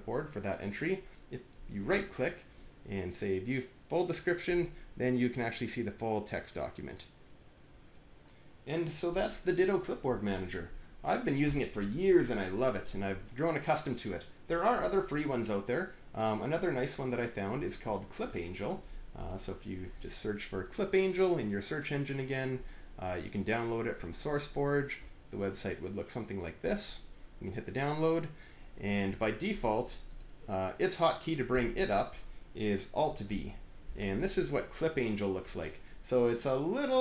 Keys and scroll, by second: 33.2 alt+v.